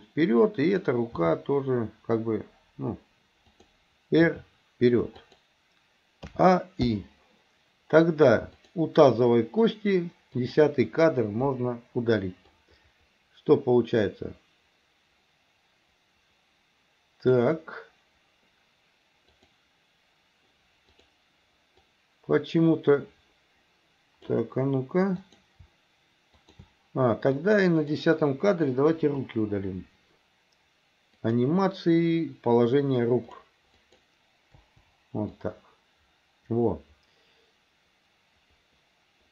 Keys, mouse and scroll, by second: 0.7 click, 1.2 g, 4.2 r, 6.3 a, 6.9 i, 8.6 click, 10.4 click, 11.5 Delete, 12.6-17.4 drag, 19.4 click, 21.0 click, 21.9-24.4 drag, 25.2 click, 26.4 shift+click, 27.4 click, 29.0 Delete, 31.2 click, 33.3 click, 33.5 click, 33.8 click, 34.6 Delete, 35.5-39.3 drag.